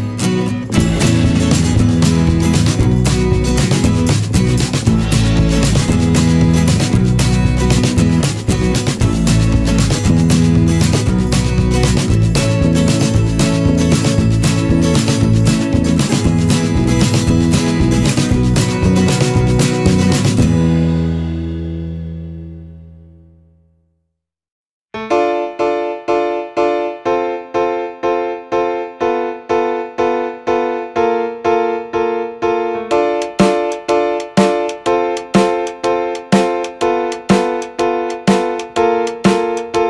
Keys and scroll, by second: 0.3 ctrl+=, 11.6 ctrl+-, 12.7 ctrl+z, 13.5 ctrl+=, 24.2 ctrl+-, 38.3 ctrl+-, 39.3 ctrl+=.